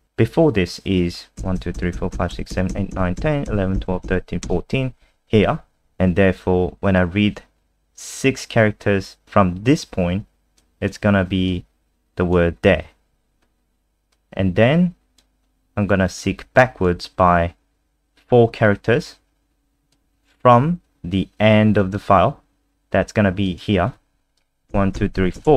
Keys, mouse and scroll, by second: 1.4 Left, 1.5 Left, 1.7 Left, 1.9 Left, 2.1 Left, 2.3 Left, 2.5 Left, 2.7 Left, 2.9 Left, 3.2 Left, 3.5 Left, 3.7 Left, 4.0 Left, 8.1 click, 13.1-14.1 scroll down 1, 14.1 click, 24.7 Left, 24.9 Left, 25.3 Left.